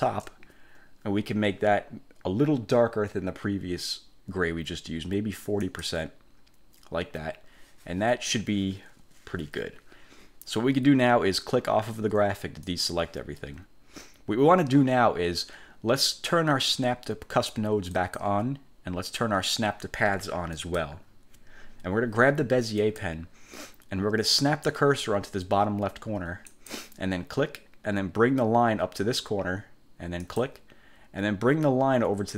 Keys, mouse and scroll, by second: 5.8 click, 12.8 click, 18.1 click, 20.7 click, 23.0 click, 26.6 click, 30.4 click.